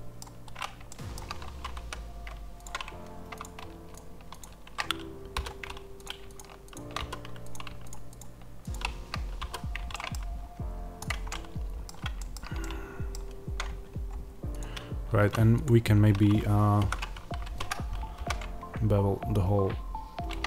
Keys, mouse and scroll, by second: 1.2-2.5 scroll, 2.5 x, 3.3 click, 3.8 shift+click, 5.2 f, 5.9 click, 6.2 shift+click, 6.9 f, 7.4 click, 7.8 shift+click, 9.3 f, 9.8-10.9 middle drag, 10.1 Tab, 10.4-10.9 scroll down 2, 10.9 click, 11.2-14.4 middle drag, 13.3 scroll down 2, 13.5 Tab, 14.4 click, 15.0 2, 15.5 click, 16.1-18.0 scroll up 1, 18.0 ctrl+b.